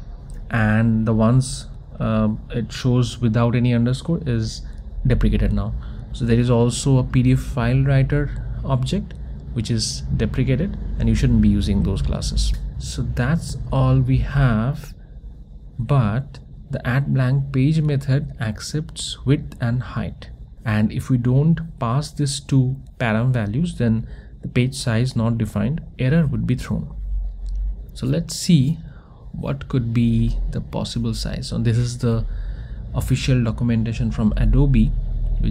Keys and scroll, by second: 1.8 Return.